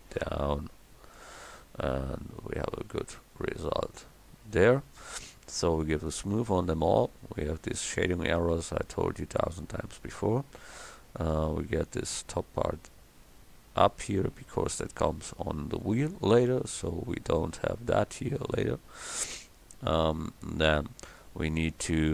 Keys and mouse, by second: 1.3 Tab, 1.8-2.7 middle drag, 10.2 Tab.